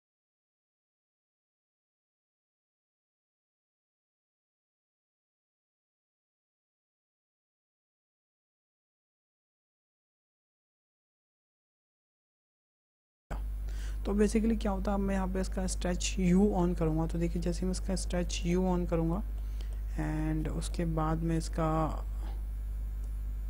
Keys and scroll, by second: 0.4 f, 1.8 ctrl+a, 5.7 KP_0, 6.0 KP_1, 6.0 Tab, 6.2 Tab, 6.9 ctrl+a, 7.1 Return.